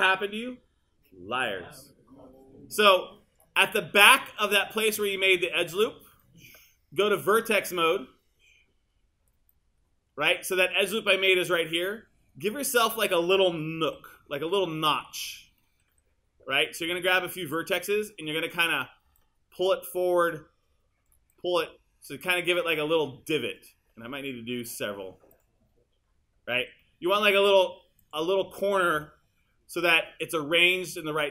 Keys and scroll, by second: 13.9 q, 15.9 w, 26.6 q, 29.0 w.